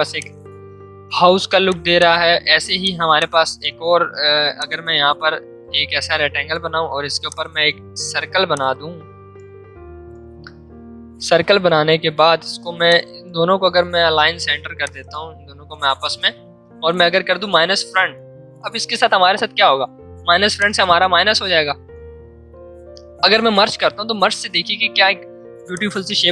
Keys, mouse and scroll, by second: 0.1 space, 0.6 space, 4.5-6.9 shift+drag, 6.9 v, 7.8 l, 8.5 shift+click, 9.3 shift+space, 12.5 v, 12.9 click, 20.5 click, 21.7 ctrl+z, 25.7-26.3 drag.